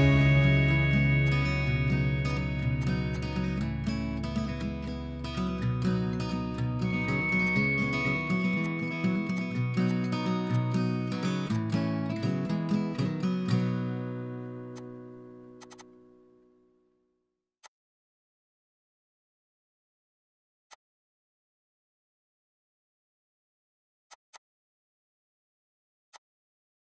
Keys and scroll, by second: 16.2 2, 16.3 Return.